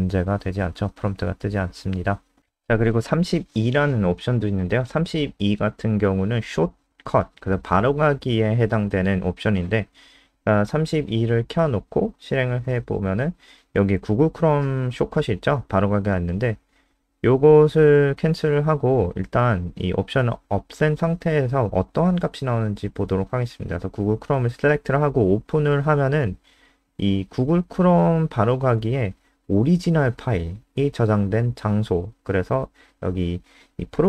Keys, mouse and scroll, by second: 1.4 scroll down 2, 2.0 click, 2.5 Up, 2.8 End, 3.1-4.1 typing, 10.9 ctrl+s, 11.3 F5, 14.2 click, 20.4 Left, 21.0 ;, 21.3 ctrl+s, 21.7 F5, 24.0 click.